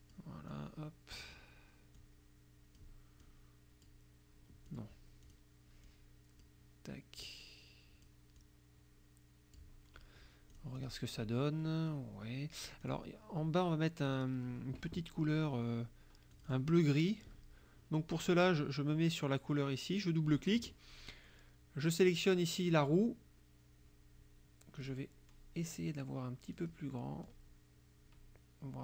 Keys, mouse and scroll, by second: 0.5 click, 2.0 click, 3.3 click, 4.7 click, 5.3 click, 5.9 click, 7.3-8.3 drag, 8.4-9.8 drag, 10.6 click, 12.9 click, 14.1 click, 16.4 click, 22.8 click, 24.9 click, 26.7 click, 27.3-28.8 drag.